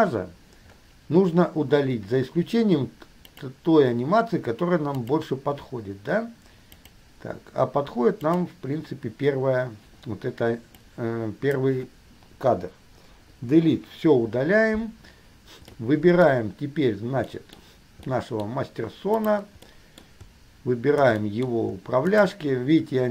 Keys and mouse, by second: 0.0 click, 3.5 click, 5.2 click, 7.0 click, 8.4 click, 11.1-11.9 drag, 13.2 Delete, 15.9-19.5 middle drag, 19.7-20.4 middle drag, 21.4-21.8 middle drag, 22.2 shift+middle click.